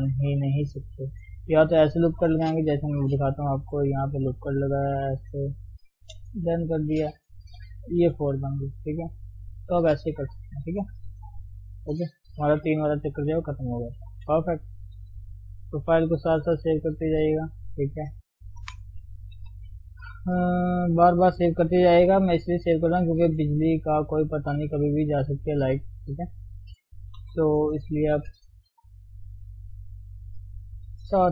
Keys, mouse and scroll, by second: 3.6 k, 6.9 click, 7.7 g, 10.6-11.2 scroll down 1, 11.2-12.0 scroll up 1, 12.0-12.5 scroll up 3, 12.6 g, 13.2 Tab, 13.4 scroll down 1, 13.7 middle click, 14.1-14.4 scroll up 1, 14.4 middle click, 15.0 Tab, 15.9 ctrl+shift+s, 17.3 ctrl+shift+s, 17.6-19.1 middle drag, 19.1 scroll down 2, 19.3 KP_3, 19.7-20.0 scroll up 1, 20.0 shift+middle click, 20.2-21.1 scroll up 2, 20.3 Tab, 21.1-21.4 scroll down 1, 21.4-22.0 scroll up 1, 22.0-22.4 scroll down 2, 22.4-24.6 middle drag, 24.6 click, 24.8-25.9 middle drag, 25.9 ctrl+click, 26.2-27.2 middle drag, 27.2 KP_3, 27.5-27.8 scroll up 2, 28.0 shift+z, 28.9 g.